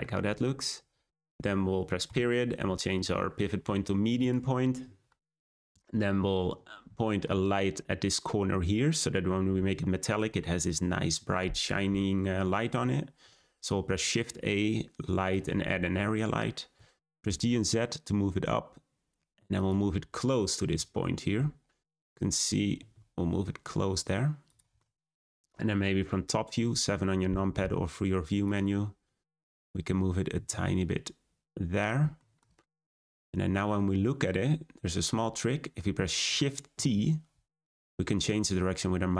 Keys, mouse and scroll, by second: 2.0 ., 4.7-5.0 scroll up 4, 5.4 scroll down 1, 7.0-10.1 shift+middle drag, 13.2 shift+a, 16.7 g, 19.9-20.5 scroll up 4, 20.5 scroll down 3, 22.0-22.3 scroll up 3, 22.7 g, 24.7-27.5 middle drag, 29.6-30.3 scroll up 2, 30.3 g, 32.1-33.9 shift+middle drag, 33.9-34.6 scroll up 3, 34.6-35.0 scroll down 1, 35.0-36.7 middle drag, 36.7 shift+t.